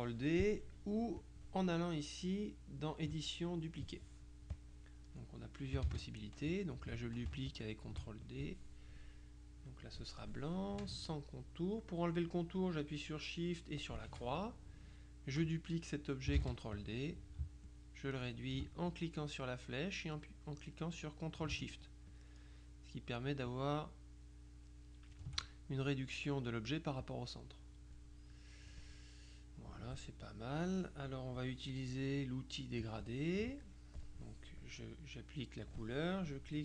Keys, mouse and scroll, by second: 1.3 click, 4.6 click, 5.9 ctrl+d, 6.6 click, 7.6-8.9 ctrl+shift+drag, 9.9 click, 13.9 shift+click, 16.4 ctrl+d, 16.8 ctrl+click, 22.2-25.7 ctrl+shift+drag, 27.1 click, 28.8 middle click, 29.8 click, 32.8 click.